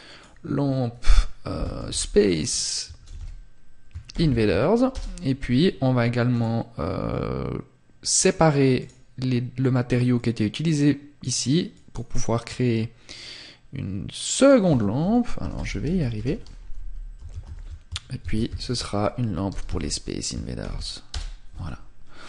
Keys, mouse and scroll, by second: 5.5 click, 7.3 click.